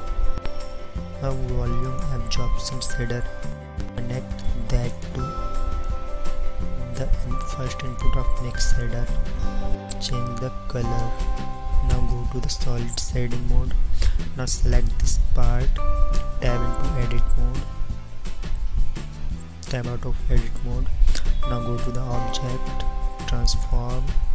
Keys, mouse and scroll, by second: 1.3 shift+a, 12.5 shift+z.